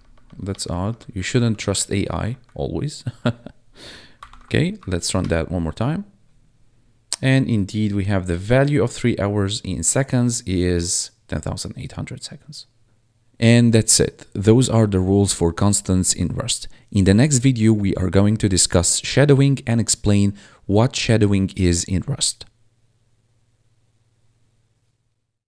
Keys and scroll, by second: 1.3 ctrl+s, 2.2 Right, 4.2 ctrl+`, 4.7 Up, 5.2 Return, 9.4 1.